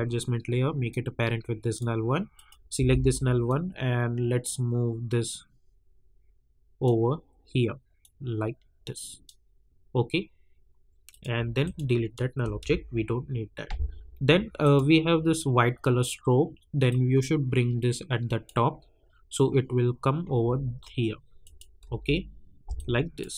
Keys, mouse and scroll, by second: 2.7 v, 3.4-11.1 drag, 14.6 click, 16.8-21.4 drag, 21.8 u, 22.7 click.